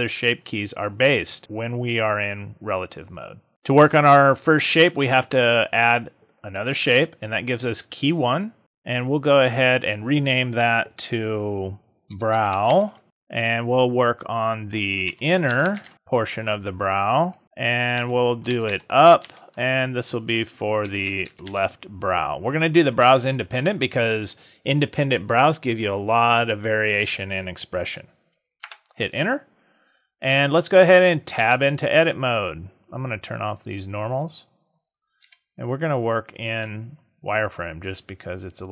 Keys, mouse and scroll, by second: 4.8 click, 9.5 click, 15.6 n, 31.4 Tab, 33.4 click, 34.6 scroll up 2, 35.2 z, 37.0 shift+middle click.